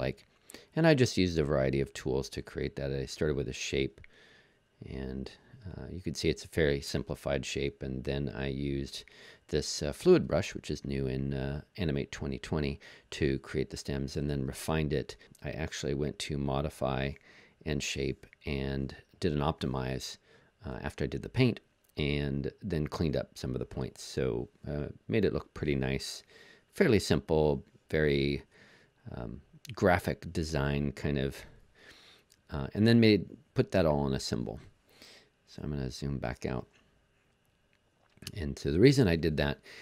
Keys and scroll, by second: 35.4 super+-, 36.1 super+-.